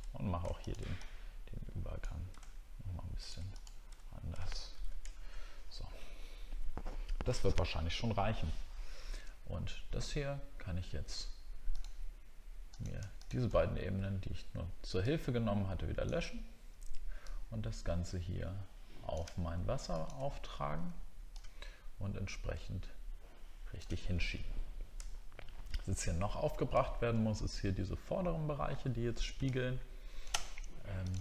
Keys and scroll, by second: 4.7 ctrl+z, 5.2-5.7 alt+scroll down 2, 25.1 alt+scroll up 1, 26.8 alt+scroll up 1.